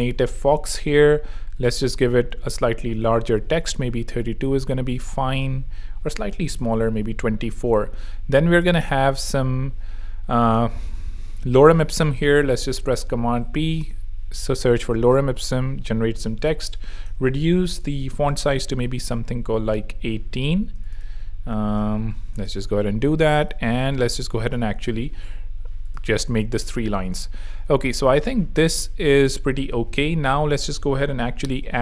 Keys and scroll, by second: 0.0-3.9 typing, 6.0-7.0 typing, 12.4 super+p, 13.5 super+Down, 13.8 Return, 16.6 |, 17.0 super+i, 17.1 super+a, 17.3 super+2, 17.4 0, 17.8 super+a, 18.0 super+i, 18.0 8, 18.2 Page_Up, 20.3 Escape, 21.9 super+i, 22.1 8, 22.3 Return, 22.9 super+Return, 24.7 BackSpace, 25.6 Escape, 26.2 v, 29.6 a, 30.3 v, 31.2 o.